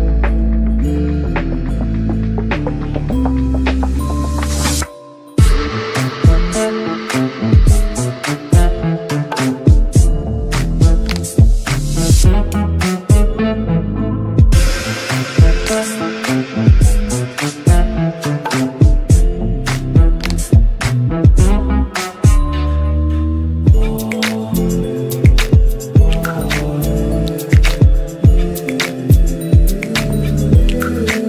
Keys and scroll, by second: 4.2 g, 16.5 g, 24.1 g.